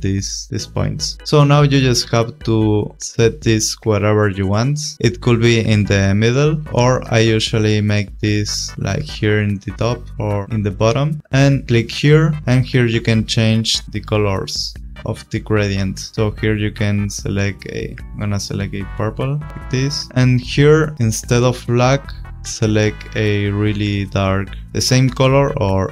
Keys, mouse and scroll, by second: 2.2 click, 4.4 click, 5.7 click, 11.6 click, 13.8 click, 16.1 click, 20.1 click, 21.5 click, 25.4 click.